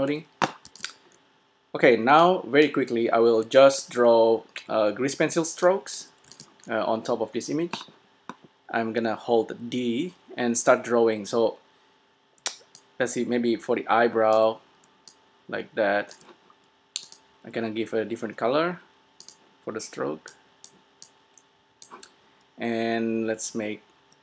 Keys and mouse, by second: 0.0-1.6 drag, 0.0 0, 0.8 s, 2.4 click, 2.9 click, 5.7-7.6 drag, 6.5 s, 12.5 d, 12.9-14.6 drag, 14.5 d, 14.9 d, 15.2-18.9 drag, 16.4 d, 19.5-21.0 drag.